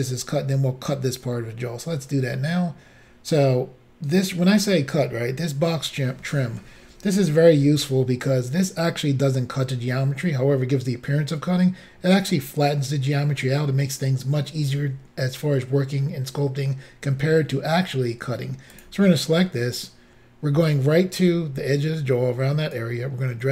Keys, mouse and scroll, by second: 18.9 click, 22.8 click.